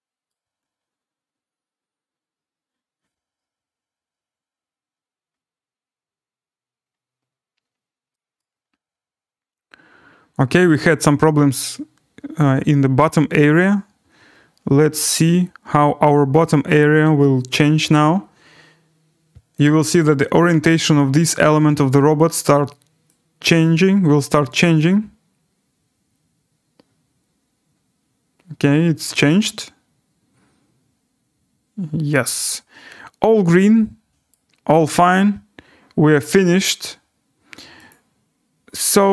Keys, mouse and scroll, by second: 0.3 right click, 7.6-8.2 scroll, 8.4 right click, 9.7-10.2 scroll, 19.5 click, 32.4 click, 32.8-33.6 scroll, 34.3 right click, 37.9 click.